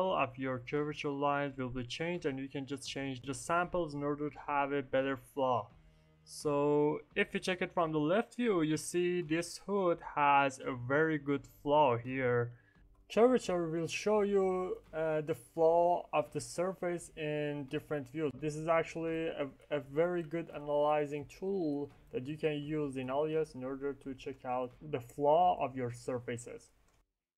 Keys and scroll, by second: 0.5 4, 0.7 Return, 1.8 5, 2.0 Return, 12.9 F9.